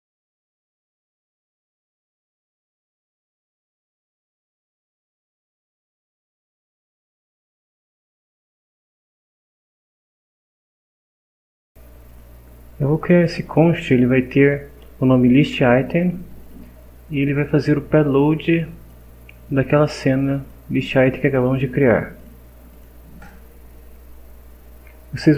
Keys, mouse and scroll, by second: 5.3 Left, 6.9 End, 7.0 Left, 7.3 Right, 7.6-9.5 typing, 11.0 click, 12.1 click, 13.4 click, 14.3 click, 16.4 click, 18.1 click, 19.5 click, 20.4 click, 22.2 click, 22.7 click.